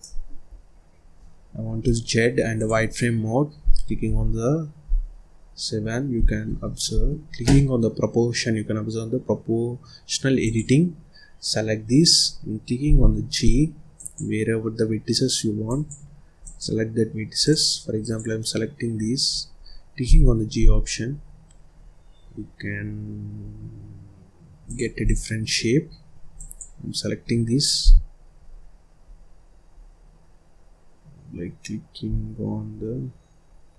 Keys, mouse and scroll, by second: 0.4-1.7 scroll down 1, 1.7 z, 4.0 KP_7, 5.1 scroll up 1, 5.3-5.7 scroll down 3, 5.7-6.4 scroll up 1, 6.4 ctrl+s, 10.4 click, 11.5-11.8 scroll down 2, 11.8-12.8 scroll up 2, 12.8 g, 13.9 click, 15.6 click, 16.4 click, 17.4 click, 17.9 click, 18.9-19.3 scroll up 2, 19.3-20.0 scroll down 1, 20.0 g, 25.0 click, 25.4-25.8 scroll up 2, 25.8 scroll down 1, 26.3 click, 27.7 g.